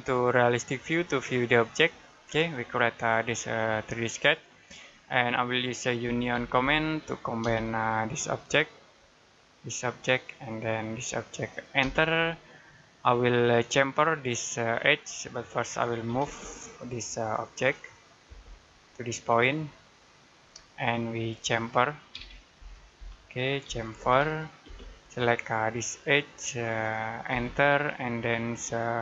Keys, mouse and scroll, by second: 0.4 click, 2.1 middle click, 2.5 scroll up 1, 5.6-7.3 typing, 7.6 scroll up 1, 8.5 click, 9.9 scroll down 1, 10.1 middle click, 11.0 click, 11.7 space, 12.2 middle click, 12.8 scroll up 1, 14.9-15.3 scroll down 1, 15.3 middle click, 15.9 typing, 16.6 click, 18.1 space, 18.3-18.8 scroll down 1, 18.8 click, 20.3 middle click, 20.6 scroll up 1, 21.3 middle click, 22.0-23.3 typing, 24.5 space, 25.0-26.0 scroll up 1, 26.0 click, 27.2 space.